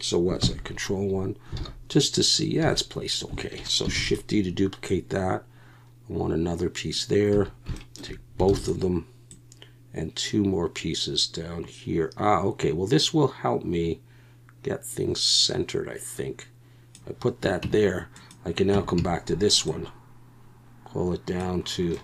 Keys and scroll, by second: 0.4 ctrl+KP_1, 1.6 alt+a, 2.6 a, 4.0 shift+d, 7.3 a, 8.5 shift+d, 17.6 Tab, 18.7 Tab, 19.0 a.